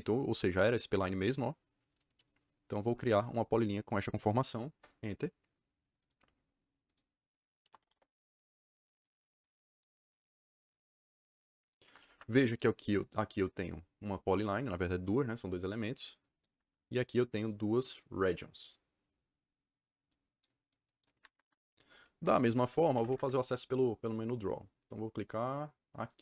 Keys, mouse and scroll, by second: 4.6 KP_Enter, 5.9 click, 6.8 click, 7.3-8.3 typing, 8.9 click, 11.5 click, 11.7 Escape, 11.9 Escape, 12.0 Escape, 12.4 click, 12.9 click, 16.4 Escape, 16.6 Escape, 16.8 click, 17.3 click, 21.1 Escape, 21.4 Escape, 22.1 b, 22.4 Return, 22.8 Escape, 23.0 Escape, 23.1 Escape, 24.0 click, 26.0 click.